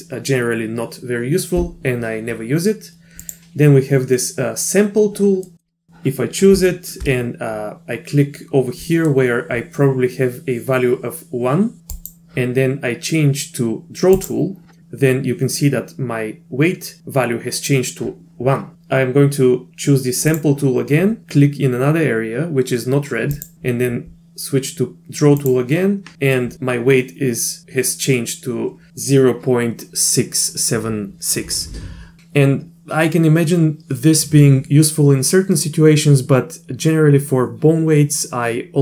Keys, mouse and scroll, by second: 3.2 click, 5.5 middle click, 6.7 shift+middle drag, 8.8 middle drag, 11.9 click, 14.1 click, 20.3 click, 23.3 click.